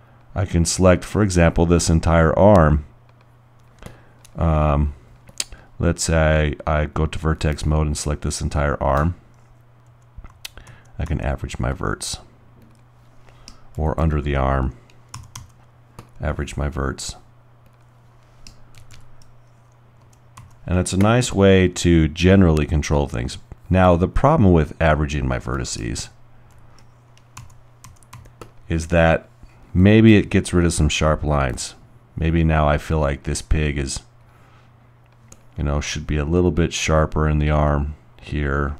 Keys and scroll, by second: 10.0-11.3 typing, 13.7 typing, 15.2-15.8 typing, 17.2 typing, 18.7-20.0 typing, 21.1 typing, 26.0-28.2 typing.